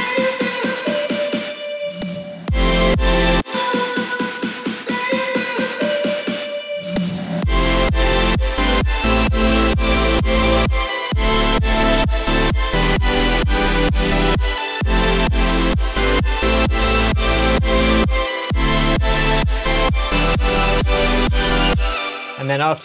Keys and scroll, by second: 3.3 space, 22.0 space.